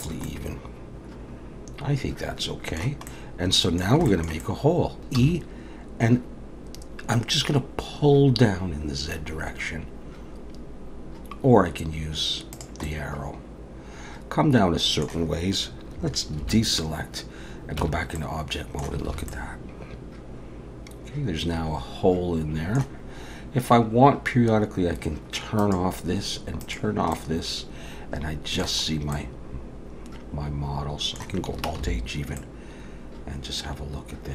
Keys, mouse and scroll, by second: 0.2 middle click, 3.1 middle click, 4.1 shift+middle click, 4.4 middle click, 5.2 e, 12.8 middle click, 16.4 alt+a, 17.8 Tab, 18.2 middle click, 19.1 alt+a, 19.3 middle click, 25.6 click, 26.6 click, 27.1 middle click, 28.9-29.2 scroll up 2, 29.1 middle click, 31.8 alt+h, 32.4 middle click.